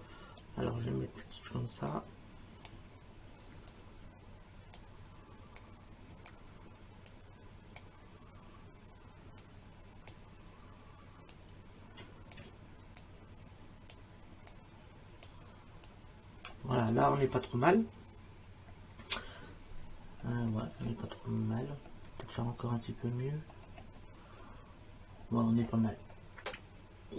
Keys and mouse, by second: 0.4 shift+click, 2.7 shift+click, 4.8 shift+click, 6.3 shift+click, 7.8 shift+click, 10.1 shift+click, 12.3 shift+click, 13.9 shift+click, 15.3 shift+click.